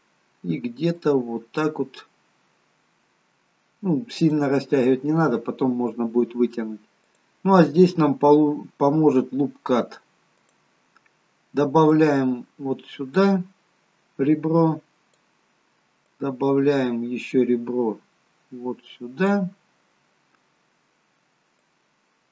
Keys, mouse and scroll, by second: 1.1 click, 1.1-1.6 scroll down 2, 7.1 click, 10.5 click, 12.0 click, 16.1 click, 19.7-20.5 scroll up 5, 20.5 scroll down 1, 21.6 click.